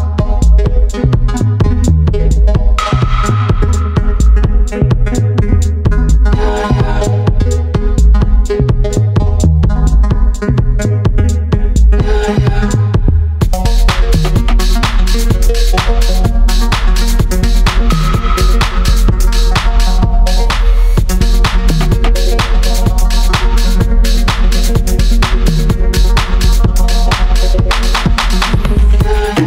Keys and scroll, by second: 14.3 ctrl+alt+shift+e.